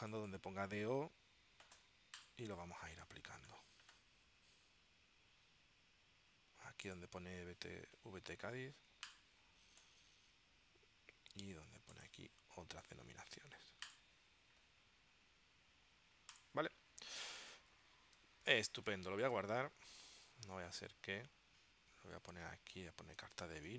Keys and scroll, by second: 18.7 space, 20.0 shift+super+s, 23.0-23.7 typing.